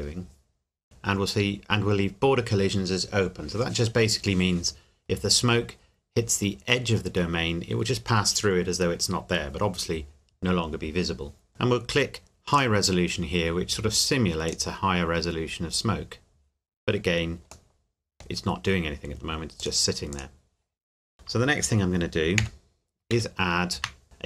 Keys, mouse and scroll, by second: 0.8 click, 12.5 click, 17.7 middle click, 19.6 click, 22.4 KP_1, 23.1 shift+a.